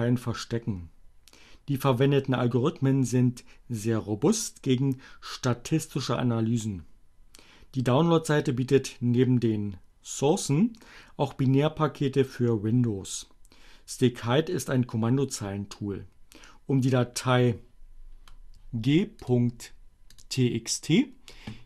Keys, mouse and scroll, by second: 19.2 click, 20.2 click.